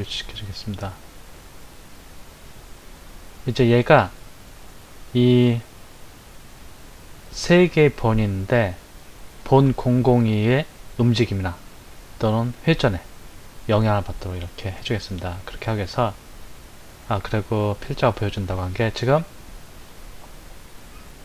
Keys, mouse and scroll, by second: 14.7 click, 19.7-21.2 middle drag.